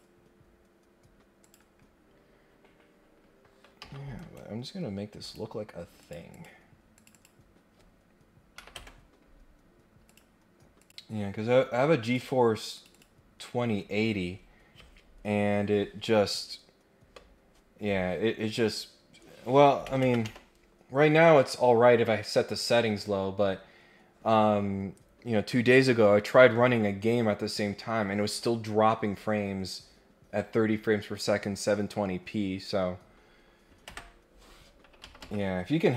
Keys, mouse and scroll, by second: 1.4 click, 2.2 scroll down 2, 2.5 scroll up 2, 3.8 Escape, 4.2 right click, 5.2 click, 6.0 click, 6.3 click, 6.9 click, 7.1 click, 10.1 click, 10.8 click, 12.0 click, 12.7 click, 35.0 Escape.